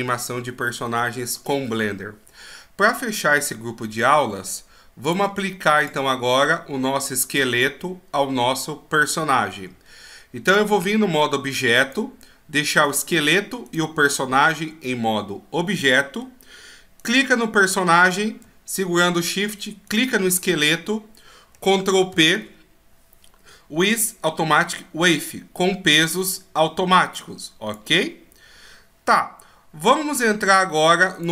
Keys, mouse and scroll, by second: 2.9 middle click, 5.9 click, 10.5 right click, 11.8 right click, 13.6 right click, 14.3-14.6 shift+scroll up 4, 14.6-15.8 shift+scroll down 2, 15.8 middle click, 17.0 right click, 19.8 shift+right click, 22.1 ctrl+p, 30.4 right click, 31.1 right click.